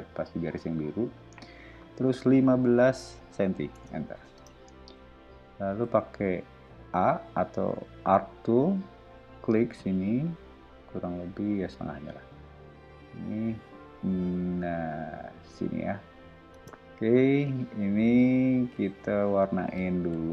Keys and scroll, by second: 2.3 1, 2.8 5, 3.7 Return, 4.3 space, 5.8 a, 16.5 space, 19.6 b.